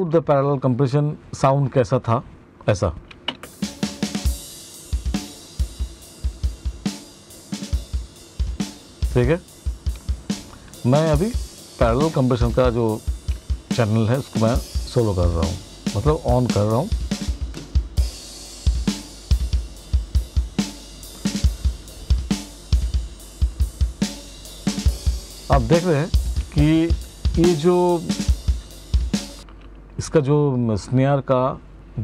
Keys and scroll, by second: 2.8 space, 28.8 space.